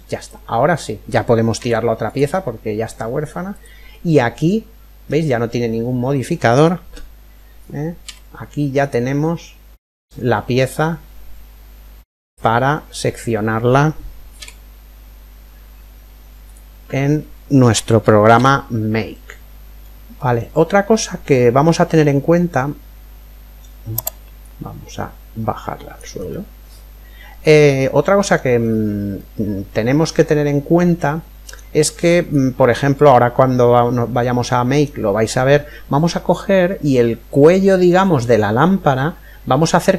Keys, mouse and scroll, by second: 2.1-7.1 middle drag, 3.1-4.9 right drag, 7.6 z, 8.8-10.8 middle drag, 12.7 scroll up 1, 12.9-15.0 middle drag, 13.9 z, 18.0 z, 19.4-22.9 middle drag, 23.9 click, 25.9-27.7 middle drag, 28.1-30.5 middle drag, 31.5-32.8 scroll up 1, 32.8-34.6 middle drag.